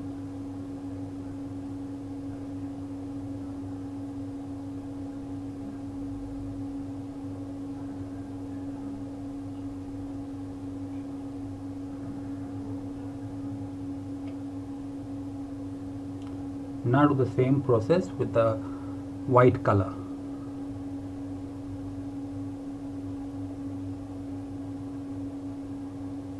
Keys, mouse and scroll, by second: 10.8 ctrl+z, 11.0 click.